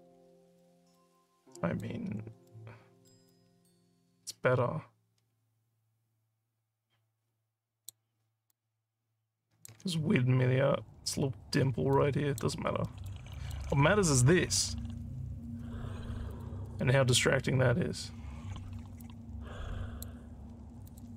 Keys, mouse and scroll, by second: 0.3 alt+middle click, 0.6 alt+middle click, 1.1 alt+click, 2.0 scroll down 1, 2.5 alt+middle click, 3.3-7.8 alt+drag, 8.5-9.6 alt+drag, 11.9 alt+click, 12.8 alt+middle click, 13.3 alt+click, 16.3 click, 19.0-20.0 drag, 20.8 click.